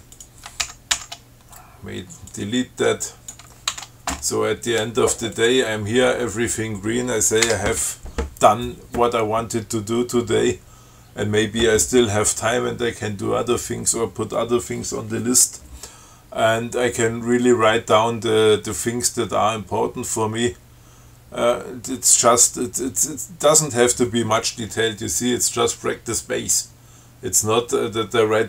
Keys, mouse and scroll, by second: 0.4 ctrl+click, 0.9 ctrl+c, 2.6 click, 4.0 ctrl+w, 5.6 click, 7.7 BackSpace.